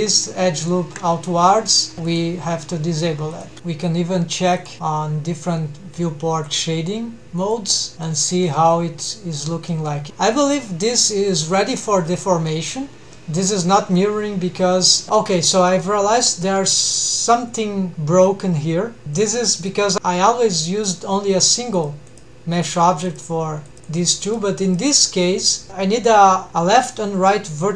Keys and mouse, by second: 2.3 click, 3.5 Tab, 3.5 middle click, 4.6 click, 6.3 click, 8.6-9.1 middle drag, 9.7-10.0 middle drag, 10.1-10.9 middle drag, 11.8-12.6 middle drag, 15.1 middle click, 15.7 middle click, 16.4 middle click, 19.6 click, 23.1-23.8 drag, 23.9-24.9 drag, 25.1 click.